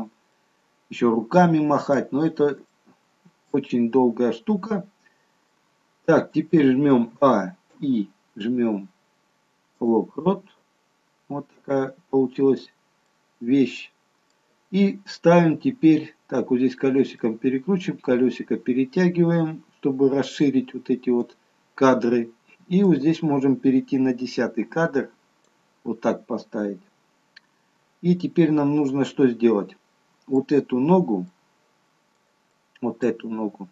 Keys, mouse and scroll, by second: 0.4 middle click, 2.8 shift+middle click, 3.8-4.5 scroll up 1, 4.5-5.4 scroll down 1, 5.6 middle click, 7.6 a, 7.8 i, 11.1-11.7 scroll up 2, 11.7-12.3 scroll down 1, 12.3-13.1 scroll down 1, 13.1 middle click, 16.8-18.6 scroll up 9, 17.3 middle click, 18.7-19.3 scroll up 2, 19.5-20.4 scroll up 5, 20.6 middle click, 23.3 click, 27.2-28.1 scroll up 2, 28.1-28.6 scroll down 1, 29.1 middle click, 31.7 middle click, 32.6 middle click, 33.4-33.7 scroll up 1.